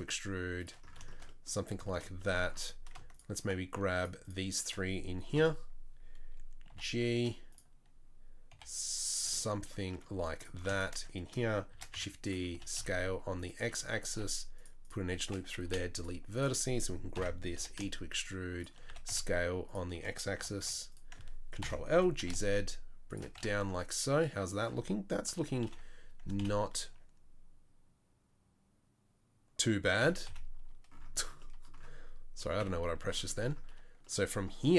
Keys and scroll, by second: 2.5 3, 5.4 KP_3, 6.7 g, 8.5 g, 11.7 shift+d, 12.5 s, 14.1 ctrl+r, 15.6 Delete, 17.2 ctrl+l, 17.6 e, 18.9 s, 20.4 g, 21.6 ctrl+l, 21.9 g, 23.4 Tab, 25.3 KP_3, 25.7 KP_1.